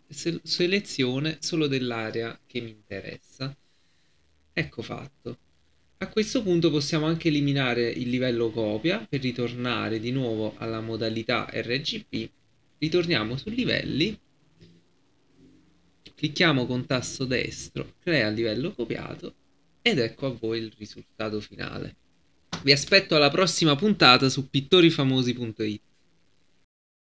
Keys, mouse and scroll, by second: 16.0 right click, 18.0 click, 26.6 F11.